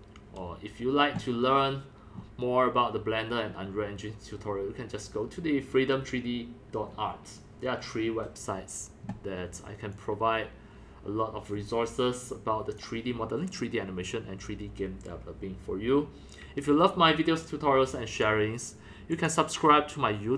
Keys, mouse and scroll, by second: 10.0-18.2 drag, 18.3 click, 19.1 click.